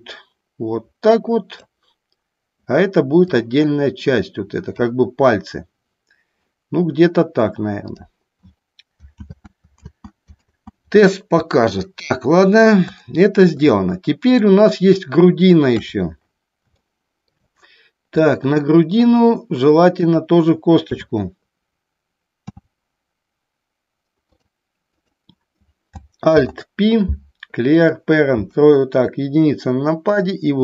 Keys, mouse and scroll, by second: 0.1-2.0 drag, 3.5-5.0 drag, 8.1 click, 9.3 ctrl+z, 10.0 ctrl+z, 10.6 ctrl+z, 13.2 shift+middle click, 13.9 middle click, 15.8 KP_3, 16.9 shift+middle click, 18.3 middle click, 21.1 KP_3, 22.7 e, 24.4 click, 25.0 click, 26.4 alt+p, 28.5 KP_1, 30.3-30.6 drag.